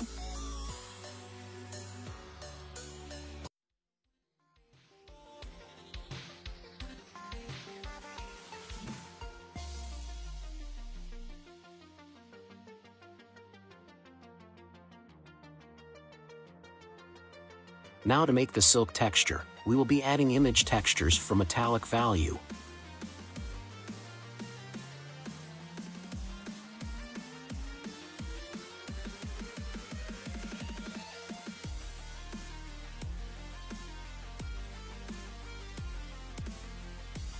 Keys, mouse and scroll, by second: 0.5-1.3 scroll down 4, 1.3-2.8 middle drag, 2.8-3.6 scroll down 1, 3.6-4.8 scroll down 10, 4.8-6.3 middle drag, 6.3-7.5 scroll down 7, 7.5 drag, 9.0 g, 10.3 click, 10.6-11.3 scroll up 3, 11.3-12.2 scroll up 10, 12.2-13.0 middle drag, 13.0 click, 14.0 ctrl+t, 15.0 click, 18.7 scroll up 1, 21.3 click, 24.8-25.7 scroll down 1, 25.7-26.5 middle drag, 26.5 click, 28.5 g, 30.3 click, 30.7-31.5 scroll down 4, 31.5-32.5 scroll up 2, 32.5-33.7 middle drag, 33.7-34.8 scroll up 4, 34.8-37.3 scroll down 2.